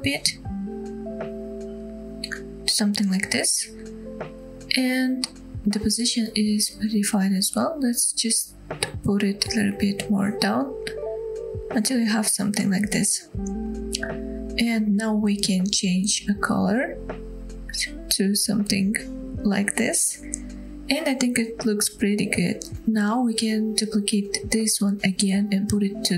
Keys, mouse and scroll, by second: 3.5-3.9 scroll down 1, 3.9-5.7 middle drag, 6.6 middle drag, 7.0 g, 12.3 click, 12.6-12.9 scroll down 2, 12.9-13.9 middle drag, 13.9-14.3 scroll up 2, 14.3-14.8 drag, 19.1 click, 19.4-19.7 scroll down 2, 19.7-20.8 middle drag, 22.3-22.7 middle drag, 22.7 click, 22.7 scroll up 4, 22.7 KP_7, 23.1 shift+middle drag, 23.7 shift+d.